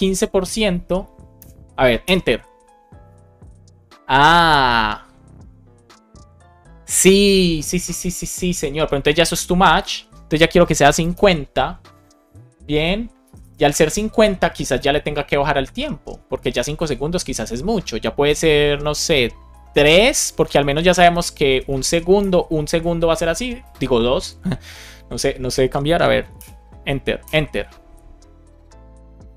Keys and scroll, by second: 1.2 Return, 10.6 BackSpace, 13.1 BackSpace, 14.0 super+s, 19.4 BackSpace, 19.9 Down, 21.6 Left, 22.1 BackSpace, 22.5 super+s, 26.2 Return.